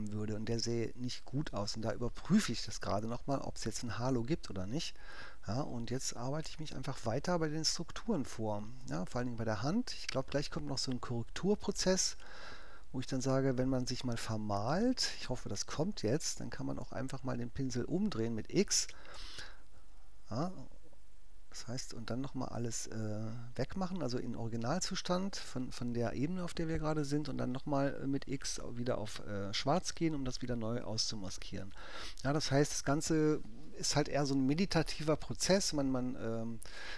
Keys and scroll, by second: 4.2 alt+super+_, 4.9 super+-, 16.4 x, 18.9 0, 19.8 alt+0, 20.0 alt+^, 23.8 x, 24.5 3.